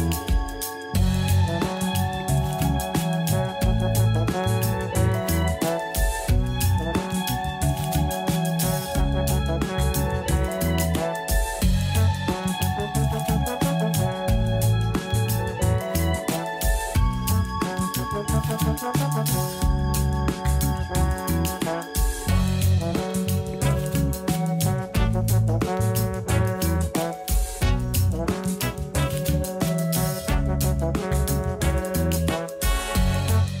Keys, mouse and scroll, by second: 0.2 g, 2.5 a, 2.7 a, 3.1 Tab, 3.3-3.8 scroll down 2, 3.8 click, 4.2-4.6 scroll down 3, 4.6 Tab, 5.9 a, 6.5 s, 8.4 alt+s, 12.8 a, 13.0 a, 13.0 scroll down 1, 13.3 Tab, 13.9-14.6 shift+middle drag, 14.6 click, 15.0-15.4 shift+middle drag, 15.4-15.8 scroll up 6, 16.0-19.0 shift+middle drag, 19.0 Tab, 21.1-22.6 middle drag, 22.6 3, 22.8 click, 23.3 g, 25.1 Tab, 25.3-26.2 scroll down 6, 26.2 KP_1, 26.9-27.3 scroll down 2, 27.3-28.0 shift+middle drag, 28.0 shift+d, 28.6 r, 30.5 g, 32.3-32.8 scroll up 3, 33.2-33.6 shift+middle drag.